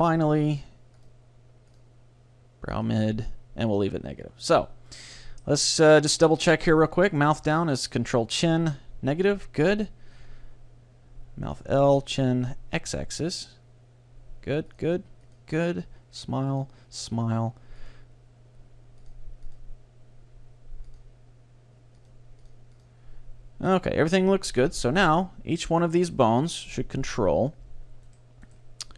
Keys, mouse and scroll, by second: 1.8-3.4 drag, 5.0-6.8 middle drag, 6.8-8.8 drag, 9.8-11.7 drag, 14.8-24.8 drag, 25.6 right click, 26.6-28.2 drag.